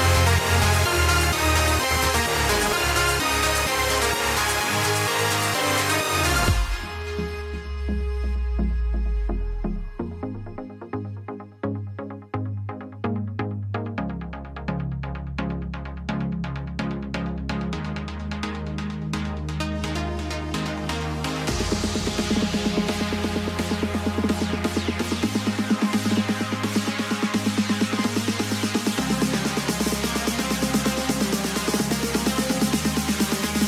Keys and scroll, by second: 3.5 ctrl+0, 12.1 ctrl++, 17.2 ctrl+-.